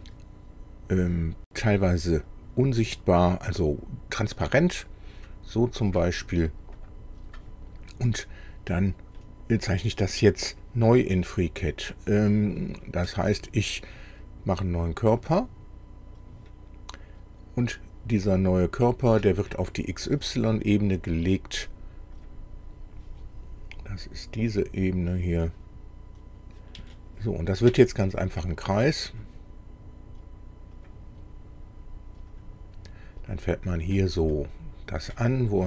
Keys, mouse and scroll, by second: 2.3-6.1 drag, 6.8 click, 7.9 scroll up 2, 8.5 scroll down 2, 9.1-10.3 middle drag, 15.4 click, 22.2 click, 25.6 click, 26.9 shift+middle click, 29.1 click, 30.8 click, 32.3 click, 32.8-33.2 scroll up 2, 33.3 scroll up 2, 33.9 click, 34.3-34.6 scroll up 2, 35.1 click.